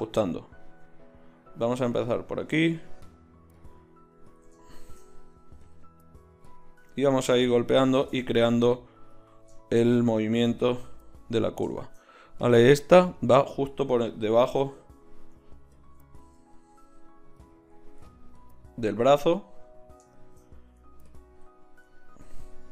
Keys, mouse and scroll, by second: 1.7-6.8 drag, 14.3 ctrl+z, 14.6 ctrl+z, 18.1-22.7 middle drag.